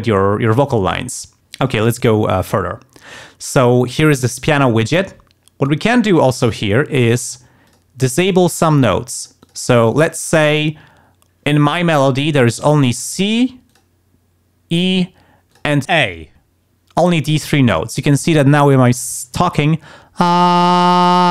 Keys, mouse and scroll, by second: 1.1 click, 7.1 click, 7.7 click, 8.0 click, 8.3 click, 8.7 click, 9.2-10.8 drag, 12.8 click, 13.7 click, 15.5 click.